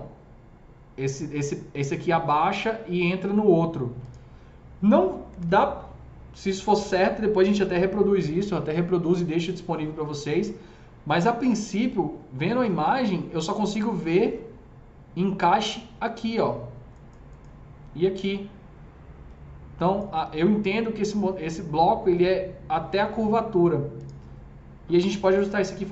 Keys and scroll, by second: 5.1 F3, 5.2 F3, 5.4 F4.